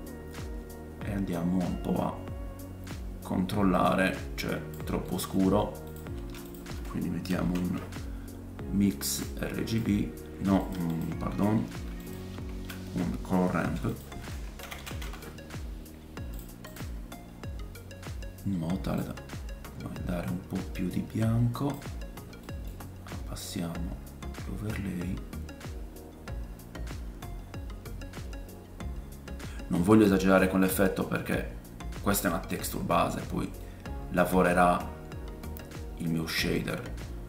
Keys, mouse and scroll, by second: 5.0 middle click, 5.6 scroll up 1, 5.9-8.7 shift+drag, 6.2 shift+a, 10.6 click, 10.9 click, 11.4 ctrl+z, 11.4 ctrl+x, 12.0-25.9 drag, 13.6 shift+a, 18.9-25.9 middle drag, 18.9-25.9 right drag, 33.6 middle click.